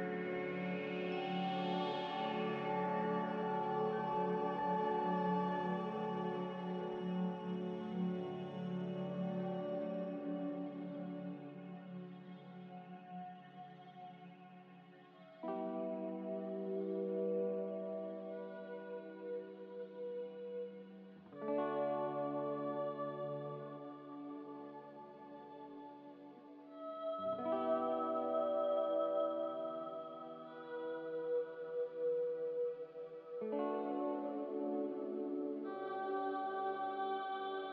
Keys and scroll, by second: 1.4 z, 17.3 a, 20.1 z, 26.0 s, 26.6 a, 30.1 s, 31.1-32.1 typing, 32.1 Tab, 33.3-35.5 typing.